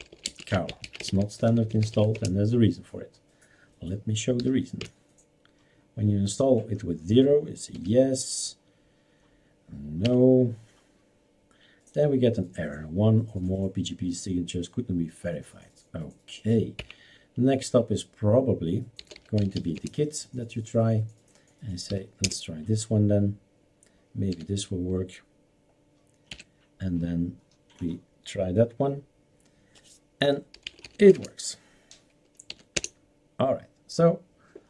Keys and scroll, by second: 0.0-2.4 typing, 4.4 0, 4.8 Return, 7.8 y, 16.9 Up, 18.8-20.9 typing, 22.0 0, 22.2 Return, 23.3-24.4 typing, 26.4 n, 30.4-31.5 typing, 32.6 y, 32.7 Return.